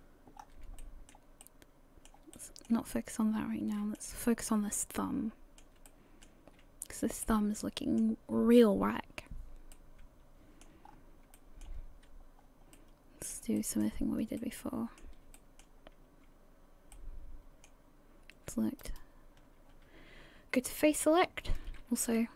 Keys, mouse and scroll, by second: 0.4 scroll up 3, 0.8 shift+middle click, 1.2 scroll up 1, 1.4 middle click, 2.3 shift+middle click, 2.9 middle click, 5.0 middle click, 5.0 shift+middle click, 5.9 shift+middle click, 5.9 shift+middle click, 6.5-6.9 scroll down 2, 7.2 middle click, 9.7 middle click, 10.9 scroll up 3, 11.4 shift+middle click, 11.6 shift+middle click, 11.9-12.4 scroll up 1, 12.4 scroll down 2, 12.7 middle click, 13.6 shift+middle click, 14.0 scroll up 1, 14.4 middle click, 15.4 shift+middle click, 15.8 scroll up 2, 16.5 scroll down 1, 16.9 middle click, 18.8 alt+right click, 18.9 alt+right click, 20.6 click.